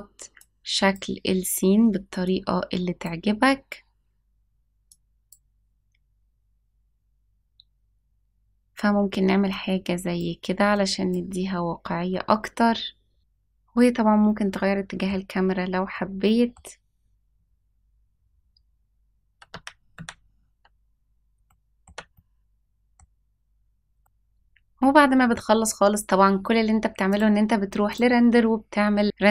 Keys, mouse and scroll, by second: 0.3 click, 2.1 click, 4.8 click, 9.4 click, 10.6 click, 13.2-15.0 middle drag, 15.8 middle click, 19.4 ctrl+z, 19.9 ctrl+z, 21.4 shift+middle click, 22.0 middle click, 23.9 shift+middle click, 27.0-29.3 drag.